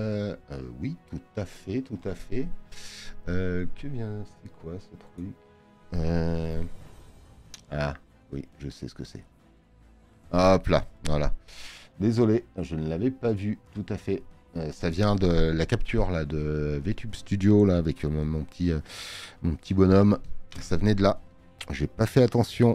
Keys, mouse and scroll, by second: 9.5 click.